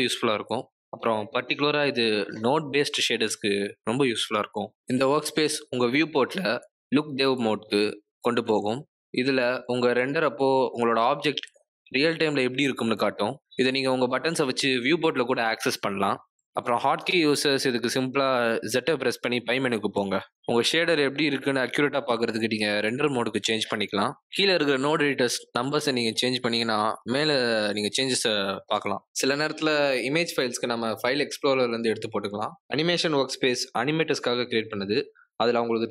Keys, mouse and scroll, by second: 1.0-2.3 scroll down 8, 8.0 middle click, 14.1 click, 14.9 click, 15.5 click, 16.1 click, 17.7 z, 23.1 z, 26.3 z, 28.6 click, 30.8 click, 31.6 click, 34.7 click.